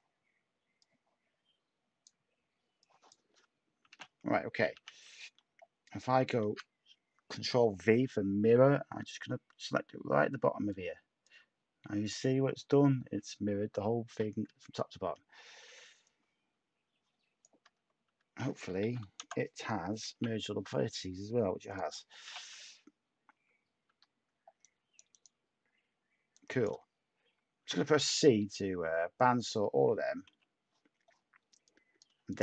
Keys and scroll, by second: 3.9 /, 4.7 Tab, 6.4 v, 14.5 Tab, 17.7 Tab, 18.0 Tab, 18.8 m, 19.2 Return, 20.1 /, 22.2 /, 23.4 Tab, 23.8 Tab, 27.6 c, 30.3 /.